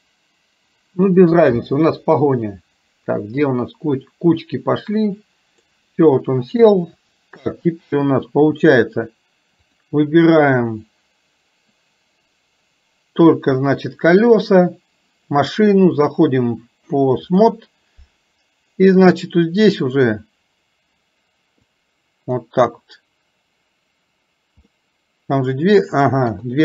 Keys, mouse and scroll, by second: 7.0 shift+middle click, 9.7 click, 16.1-17.6 drag, 19.1 click, 21.7 click, 24.7-25.9 middle drag.